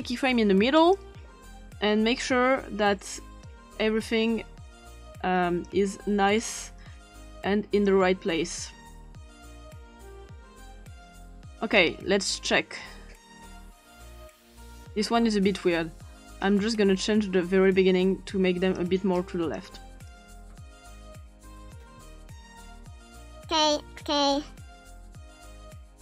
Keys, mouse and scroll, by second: 0.8 click, 3.5-5.7 drag, 6.4-7.9 drag, 8.6-9.8 scroll up 2, 9.8 click, 13.4-14.0 scroll up 2, 14.0-14.8 scroll up 1, 16.8-18.2 scroll up 2, 18.8 click, 19.1 click, 20.1 click, 20.9 click, 21.8 scroll up 2, 22.6-23.6 scroll down 2, 25.1-26.0 scroll down 1.